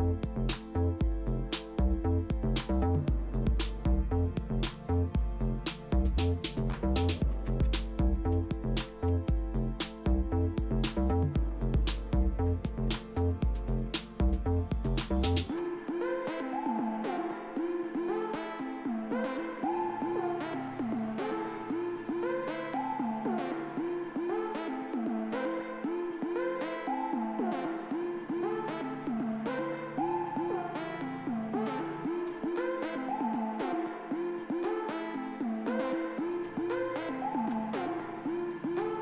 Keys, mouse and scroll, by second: 0.0-1.5 drag, 1.8 right click, 3.5 click, 5.1 click, 6.2 click, 6.8-9.3 typing, 10.9 right click, 11.8 click, 13.2 Right, 15.6 Return, 18.0 click, 20.6-24.1 drag, 21.5 typing, 23.5 typing, 25.4 right click, 26.4 click, 28.2 click, 29.6 right click, 30.5 click, 32.3 Return, 36.5 ctrl+o, 37.6 Return.